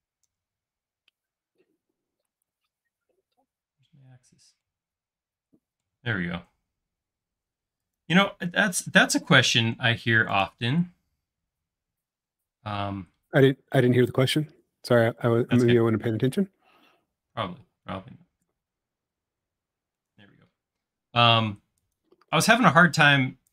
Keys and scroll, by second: 9.3 c, 13.2 typing, 14.4-15.4 typing, 22.4 c.